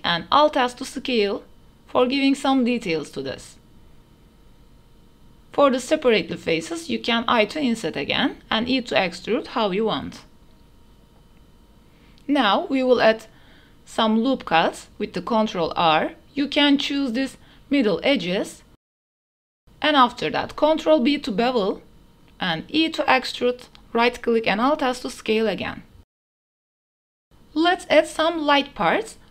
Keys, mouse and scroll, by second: 0.0 alt+s, 1.8 Tab, 2.0-3.2 middle drag, 2.4 ctrl+z, 3.6 click, 5.4 i, 9.2 e, 11.4 middle click, 12.4 Tab, 12.4 middle click, 13.0 ctrl+r, 15.0 middle click, 15.4 middle click, 15.7 3, 17.3 2, 18.2 shift+click, 18.9 shift+click, 20.4 Tab, 21.0 ctrl+b, 23.1 e, 23.8 alt+s, 26.6 shift+click, 27.0 Tab, 27.1 3, 27.1 shift+s, 27.3 shift+a, 29.2 shift+click.